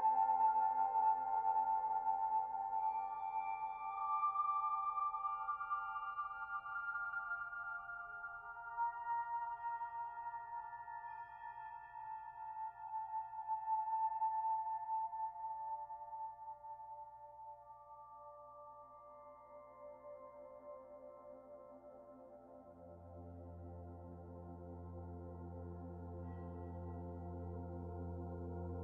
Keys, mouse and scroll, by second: 0.0 click, 4.7 ctrl+b, 13.6 Tab, 13.9-14.9 scroll down 2, 14.2 middle click, 15.7-16.4 scroll up 2, 16.1 click, 16.4 middle click, 17.0 shift+middle click, 18.3 s, 21.0 click, 22.4 click, 24.0-24.7 scroll down 2, 24.2 middle click, 27.4 shift+middle click, 27.8 middle click, 28.7 shift+middle click.